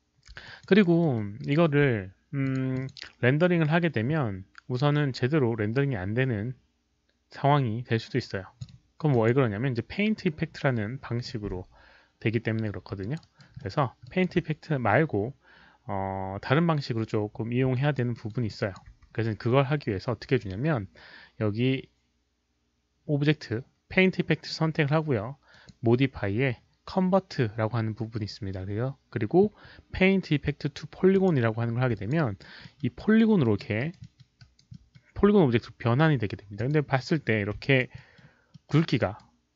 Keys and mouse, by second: 0.2 alt+middle click, 0.4 alt+click, 0.4 alt+middle click, 0.6 alt+right click, 1.0 alt+middle click, 1.3 alt+right click, 2.4 click, 2.7 drag, 4.1 alt+click, 4.1 alt+right click, 4.1 alt+middle click, 7.4 click, 7.4 alt+right click, 7.4 alt+middle click, 8.5 alt+click, 8.5 alt+right click, 8.5 alt+middle click, 8.6 alt+right click, 8.6 alt+middle click, 9.1 alt+drag, 9.7 alt+right click, 9.7 alt+middle click, 13.0 alt+click, 13.2 alt+right click, 13.6 alt+middle click, 14.0 alt+click, 14.1 alt+right click, 17.7 alt+right click, 17.7 alt+click, 18.1 alt+middle click, 18.4 alt+click, 19.2 alt+middle click, 19.2 alt+right click, 19.2 q, 20.0 alt+click, 20.0 alt+middle click, 20.0 alt+right click, 20.0 q, 25.4 alt+middle click, 25.4 alt+right click, 25.5 alt+click, 28.5 alt+click, 28.5 alt+middle click, 28.5 q, 31.1 click, 31.9 alt+click, 32.1 alt+right click, 32.6 alt+middle click, 32.9 alt+right click, 33.4 alt+middle click, 33.7 alt+right click, 34.0 alt+middle click, 34.4 alt+right click, 34.7 alt+middle click, 36.5 alt+click, 37.6 alt+right click, 37.6 alt+click, 37.9 alt+middle click, 38.5 alt+middle click, 38.9 alt+right click.